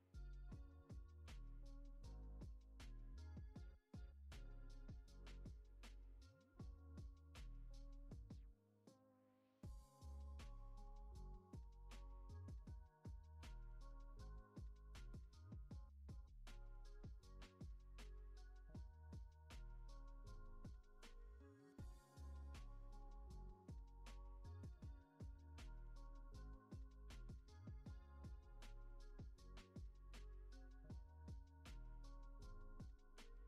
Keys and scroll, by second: 1.0 ctrl+c, 3.2 ctrl+c, 6.7 1, 7.4 Return, 10.3-11.1 typing, 13.2 9, 13.5 Return, 16.5 Down, 20.0 alt+x, 21.6 ctrl+s, 22.3 z, 23.2 alt+x, 24.2 Up, 25.7 alt+x, 27.6 ctrl+c, 28.6 z, 31.4-32.4 typing, 33.3 Return.